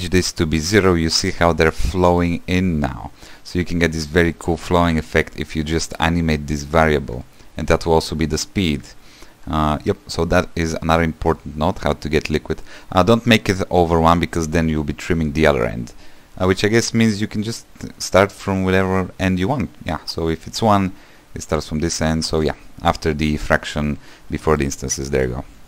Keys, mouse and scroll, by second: 7.4-12.0 shift+drag.